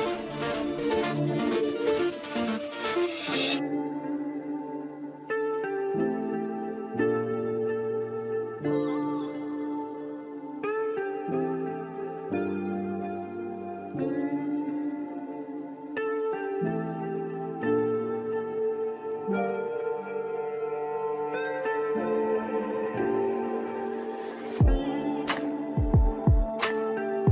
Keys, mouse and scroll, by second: 1.7-2.1 scroll up 1, 2.1 middle click, 2.8 scroll up 3, 3.2 shift+middle click, 3.9-4.2 scroll up 1, 5.6-8.6 drag, 10.5-11.7 drag, 11.7 KP_0, 14.8-17.8 drag, 20.4-20.7 scroll down 1, 20.8-22.1 middle drag, 22.1 scroll up 2, 22.7 KP_1, 23.1 Tab, 23.4 shift+middle click, 24.1 g, 25.5 ctrl+z, 25.7 click, 26.2 click, 27.0 shift+click.